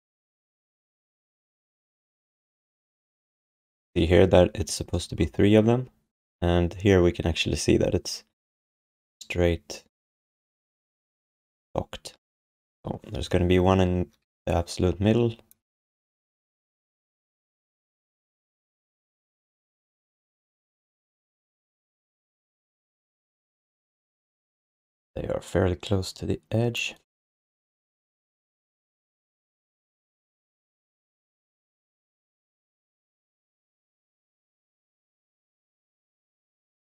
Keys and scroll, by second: 14.3 x, 16.1 x, 17.6 space, 18.4 space, 21.6 f, 30.0 e, 33.4 w, 35.9 e.